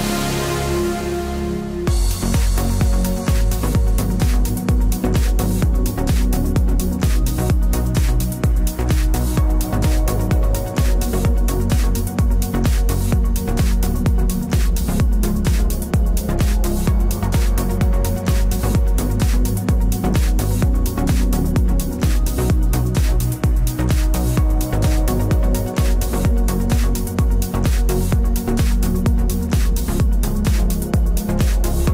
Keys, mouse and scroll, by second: 0.7 b, 1.1 g, 4.5-7.3 middle drag, 6.5-7.5 drag, 7.5 KP_Decimal, 10.0-12.0 drag, 12.6 g, 13.8 g, 17.7-19.0 middle drag, 19.0-21.2 drag, 20.4-22.2 right drag, 21.1 b, 21.6 g, 22.6 middle click, 22.9 middle click, 23.8 right click, 24.3 KP_Decimal, 24.9 g, 25.4 b, 25.9 g.